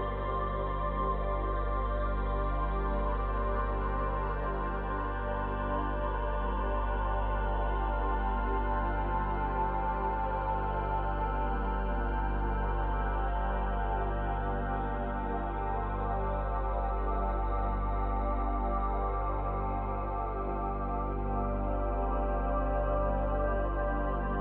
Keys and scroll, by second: 5.9 space, 10.4 space.